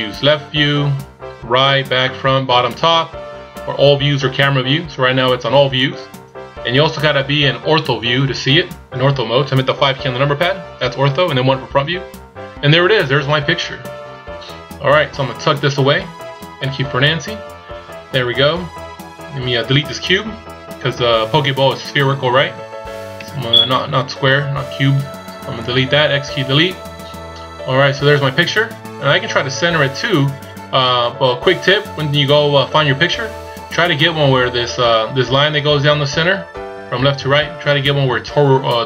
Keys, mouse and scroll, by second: 10.2 KP_5, 12.0 KP_1, 13.8-15.2 scroll down 2, 16.8 n, 17.6-20.0 scroll down 2, 23.2 x, 26.8 scroll up 1, 28.9 scroll down 1.